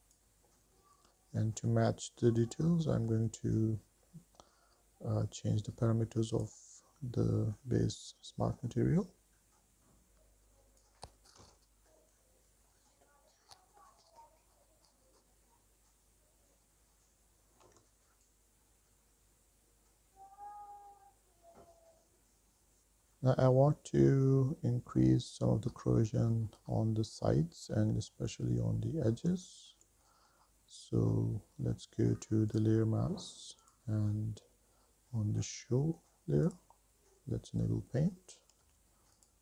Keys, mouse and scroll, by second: 1.4-2.4 middle drag, 3.0 middle click, 6.6 click, 7.9-8.8 scroll down 2, 8.8-9.6 scroll down 3, 10.5-12.4 drag, 12.6-18.1 drag, 18.1 scroll down 3, 18.3 middle click, 18.6 shift+middle click, 18.9 middle click, 19.1 shift+middle click, 19.4 shift+middle click, 19.7 middle click, 20.4 shift+middle click, 20.7 middle click, 20.7 scroll down 3, 21.2 shift+middle click, 21.4 middle click, 21.6 shift+middle click, 22.0 middle click, 22.2 shift+middle click, 22.4 middle click, 25.3-28.0 middle drag, 29.7 shift+middle click, 30.3 middle click, 31.3-32.7 scroll up 3, 32.7 click, 33.8 click, 35.5-36.6 scroll down 3, 36.6 click, 38.0-38.7 scroll up 3, 39.0 f.